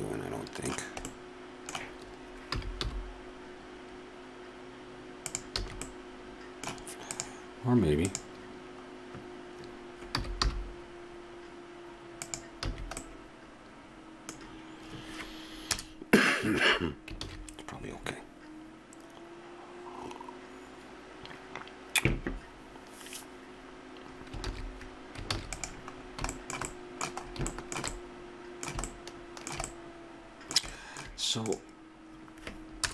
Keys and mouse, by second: 0.2 middle click, 1.2 middle click, 2.5 g, 5.6 a, 7.1-10.1 right drag, 10.1 g, 12.7 a, 15.7 KP_0, 17.4 shift+z, 24.8 shift+z, 25.3 ctrl+s, 26.1-27.2 middle drag, 31.5-32.8 right drag, 32.8 KP_0.